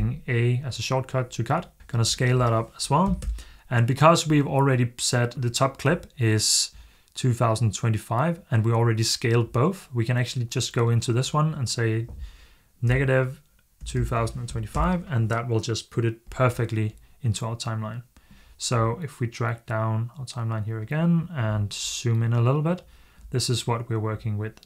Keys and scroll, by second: 1.5-2.9 typing, 3.0 Return, 12.7-14.8 typing.